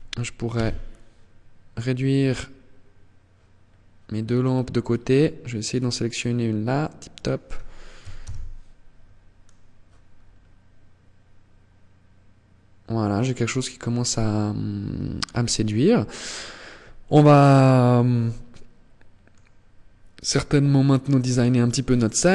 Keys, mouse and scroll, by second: 3.0-4.0 scroll down 5, 4.6 right click, 6.0 click, 8.9-9.4 scroll up 4, 12.6 scroll up 5, 17.0 middle click, 18.8 scroll up 2, 21.0 middle click.